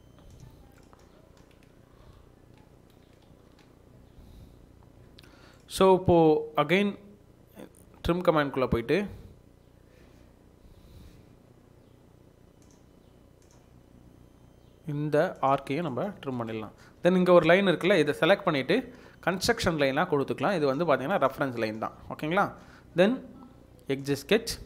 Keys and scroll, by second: 2.7 ctrl+z, 3.1 Escape, 5.2 Escape, 16.9 Escape, 17.2 Escape, 17.5 Escape.